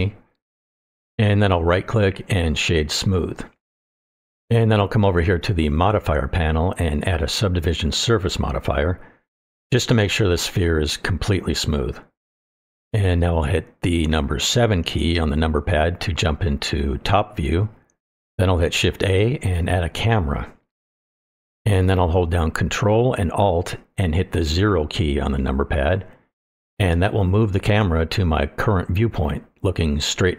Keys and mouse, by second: 0.0-1.0 drag, 2.4-3.8 right drag, 6.4-9.1 drag, 9.9 middle click, 10.9 shift+middle drag, 11.2-12.5 middle drag, 13.0-13.3 shift+middle drag, 15.5 KP_7, 19.9 shift+a, 24.5 ctrl+alt+KP_0.